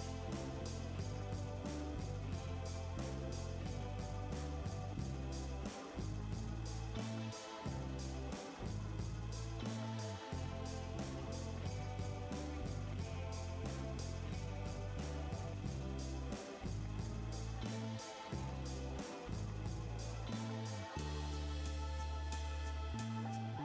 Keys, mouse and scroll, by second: 7.3 Delete, 16.1 typing, 16.4 Return, 20.6 typing, 22.0 5, 22.2 Return.